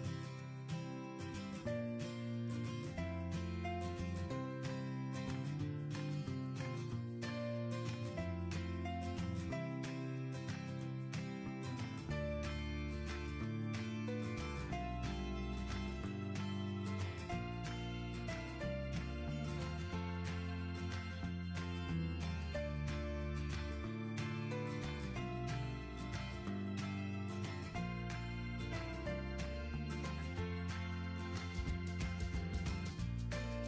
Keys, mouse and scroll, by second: 13.8 -, 16.8 typing, 29.9-31.9 typing.